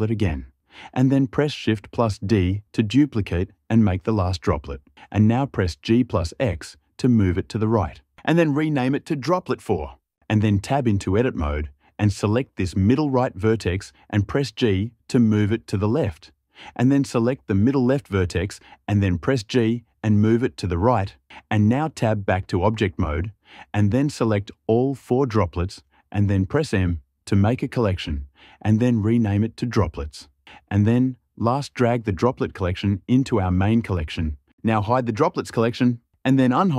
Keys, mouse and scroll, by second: 2.3 shift+d, 5.1 g, 5.6 x, 8.1 click, 10.8 Tab, 12.2-13.0 drag, 14.2 g, 15.5 click, 16.8-17.8 drag, 19.0 g, 20.7 click, 22.2 Tab, 23.9-25.0 drag, 26.7 m.